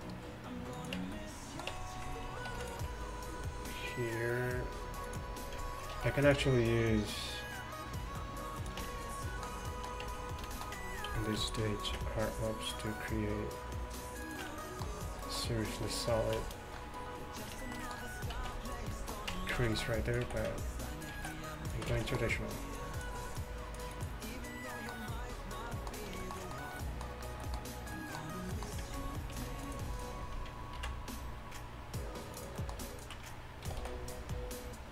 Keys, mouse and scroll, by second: 1.0 Tab, 1.8 Tab, 2.5 ctrl+r, 6.0 ctrl+r, 8.9 Tab, 10.1 Tab, 11.9 ctrl+b, 14.5 Tab, 18.4 z, 19.4 Tab, 19.6 z, 20.3 z, 20.7 click, 21.2 ctrl+z, 22.0 z, 29.4 ctrl+r, 30.8 ctrl+b, 33.7 g.